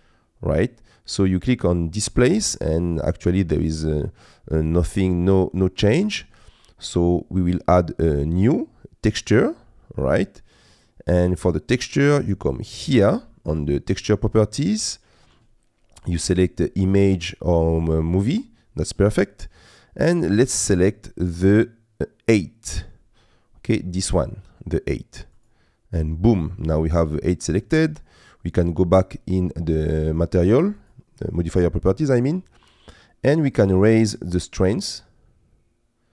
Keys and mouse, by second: 2.2-3.6 middle drag, 4.9 middle click, 8.4 click, 10.7 click, 14.3 click, 20.1-25.5 drag, 30.8 click, 33.5-36.1 drag.